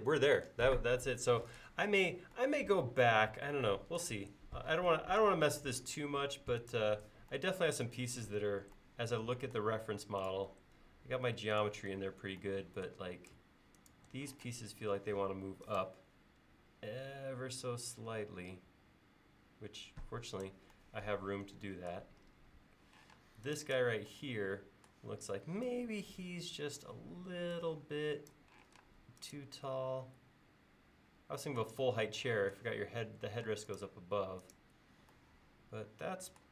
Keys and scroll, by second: 14.5 m, 16.5 Up, 23.2 space, 28.7 m, 33.5 space.